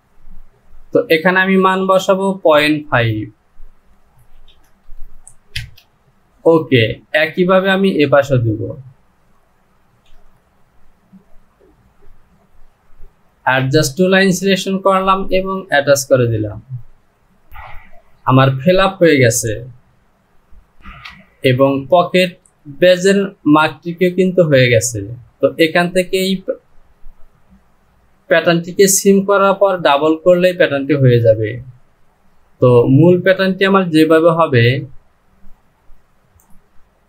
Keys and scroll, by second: 4.0 Down, 8.0 typing, 9.3 Down, 20.8 Home.